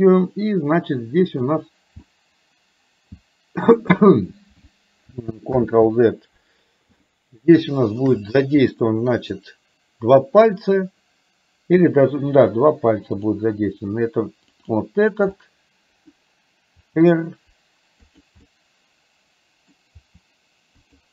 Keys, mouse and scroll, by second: 2.0 g, 5.6 ctrl+z, 7.6 middle click, 8.7 middle click, 13.2 click, 14.7 click, 15.5 middle click, 16.8 r, 18.6-19.8 middle drag, 20.1 r.